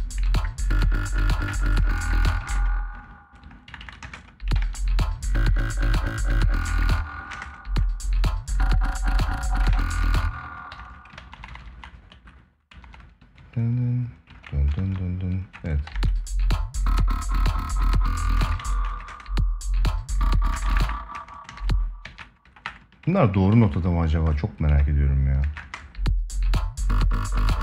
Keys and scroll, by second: 2.0 space, 4.3 ctrl+s, 6.4 space, 9.5 ctrl+s, 9.7 space, 15.2 space, 18.1 space, 20.2 space, 20.9 space, 21.8 ctrl+a, 25.3 space.